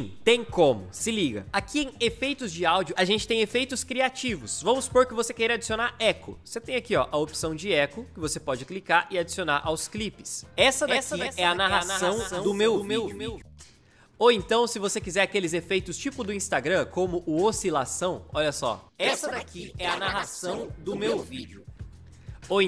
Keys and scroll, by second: 10.4 space, 13.2 space, 13.9 ctrl+z, 18.8 space, 21.7 space, 22.1 ctrl+z.